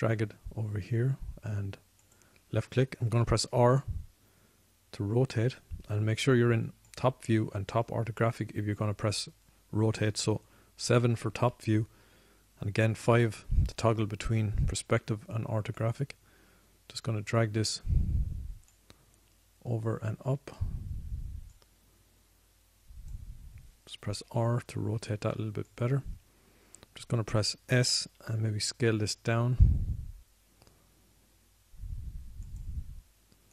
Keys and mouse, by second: 4.6 r, 8.4-10.3 drag, 12.1 KP_7, 14.1 KP_5, 14.5 KP_5, 20.1 click, 22.8 click, 25.6 r, 29.4 s.